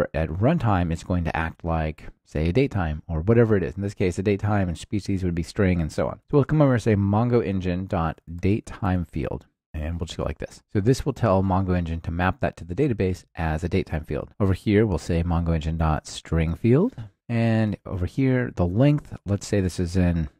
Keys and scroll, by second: 6.2 super+v, 9.6 Return, 14.2 ctrl+alt+shift+Left, 15.1 super+v, 17.1 Return, 17.3 ctrl+alt+shift+Left, 18.6 super+v.